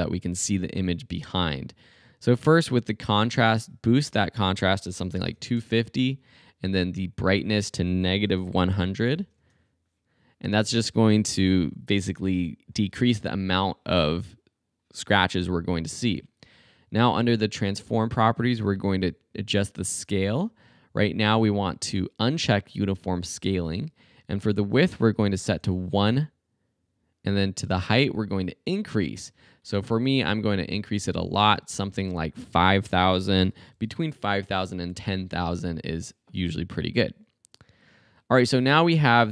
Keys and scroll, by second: 4.9-6.0 typing, 8.3-9.6 typing, 25.2 i, 25.5 Home, 33.2-34.1 typing, 34.2 Home.